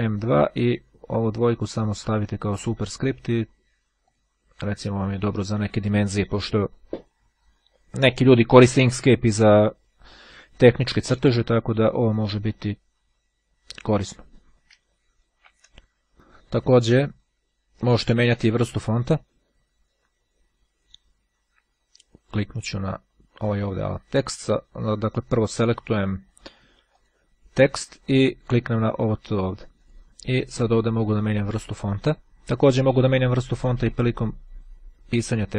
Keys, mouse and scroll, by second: 0.2 2, 0.3-1.4 drag, 2.4 click, 4.2 click, 14.6 Delete, 22.3-24.2 drag, 26.4 click, 28.2 click, 29.8 click, 31.0-32.4 drag, 35.4-35.5 drag.